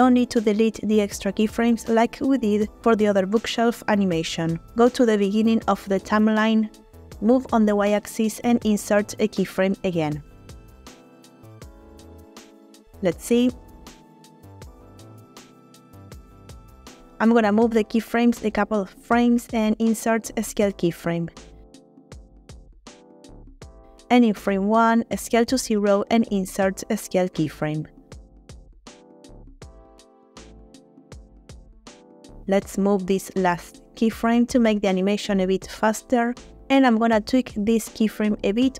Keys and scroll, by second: 7.3 g, 7.5 y, 11.5 3, 11.9 0, 12.1 Return, 16.2 space, 18.5 g, 21.2 i, 25.3 s, 25.9 0, 27.7 i, 30.1 space, 32.3 space, 34.9 g, 37.3 space.